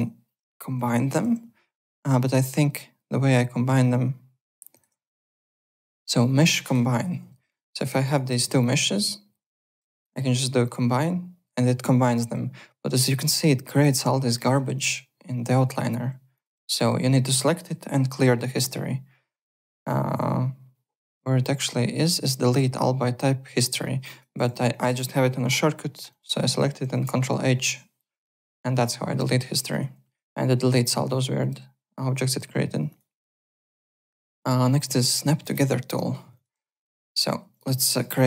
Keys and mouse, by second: 0.7 Home, 2.2 click, 4.7 click, 6.9 click, 7.4 click, 7.8 `, 8.0 click, 8.6 shift+click, 10.6 click, 13.1 click, 13.7 click, 14.2 click, 16.3 click, 24.1 click, 24.7 click, 26.1 click, 27.0 ctrl+h, 29.4 alt+right click, 32.3 alt+Tab, 32.8 alt+click, 34.6 click, 35.5 click, 35.9-37.8 typing, 35.9 middle click, 36.3 click, 37.5 click, 38.0 click.